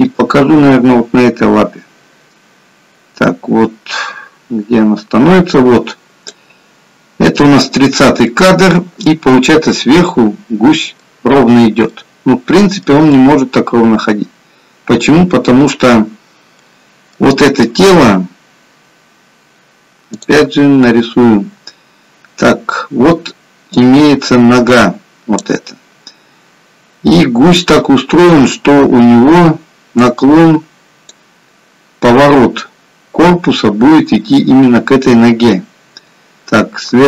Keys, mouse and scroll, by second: 0.2 click, 8.3 middle click, 12.0 middle click, 16.5 middle click.